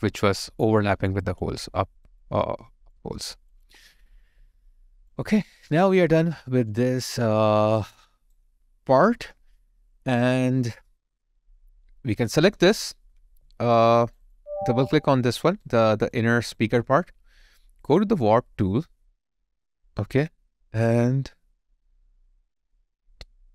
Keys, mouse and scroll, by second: 1.2 alt+click, 1.8 alt+right click, 2.2 alt+click, 5.5 alt+right click, 6.2 alt+middle click, 6.7 alt+click, 7.8 alt+right click, 13.5 alt+right click, 14.2 alt+double right click, 15.8 alt+click, 16.3 alt+right click.